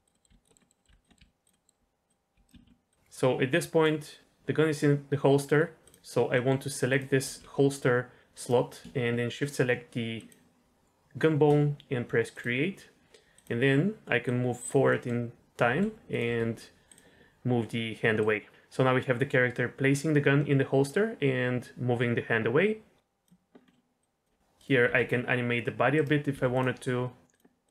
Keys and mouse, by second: 0.0-2.6 typing, 0.1 middle click, 0.5 middle click, 0.6 middle click, 0.8 middle click, 1.0 drag, 1.1 middle click, 1.5 middle click, 2.5 ctrl+z, 2.9 click, 6.3 middle click, 6.8 click, 7.2 g, 10.2 shift+click, 12.3 click, 14.2 click, 14.8 middle drag, 15.6 g, 16.2 r, 16.8 click, 18.3-23.2 drag, 23.6 middle click, 24.0 click, 24.5 click, 24.8 r, 26.3 r, 27.3 click, 27.6 click.